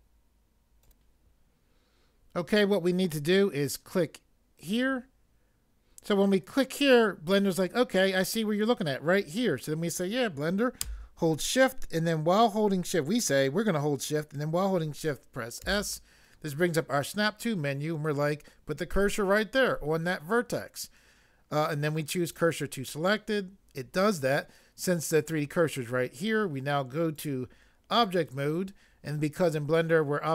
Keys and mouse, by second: 0.8 click, 4.6 click, 15.7 s, 22.3 click, 27.1 click, 28.0 click.